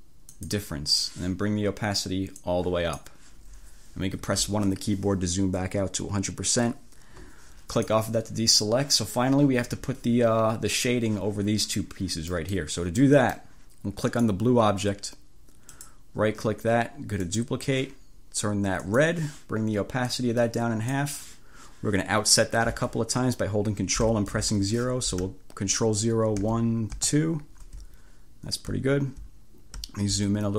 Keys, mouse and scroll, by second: 0.3 click, 2.5 click, 4.2 1, 7.8 click, 12.4 click, 13.1 click, 14.2 click, 14.5-15.8 middle drag, 15.8 right click, 17.3 click, 18.9 click, 20.2-21.3 drag, 26.5 ctrl+0, 29.0 ctrl+scroll up 2, 29.9 ctrl+scroll up 2.